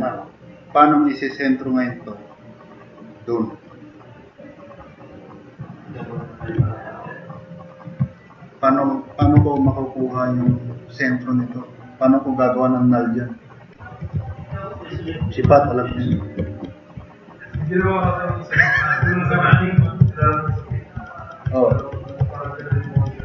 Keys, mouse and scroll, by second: 6.8 drag, 7.0 middle click, 7.0 scroll up 2, 9.2 2, 10.0-10.3 drag.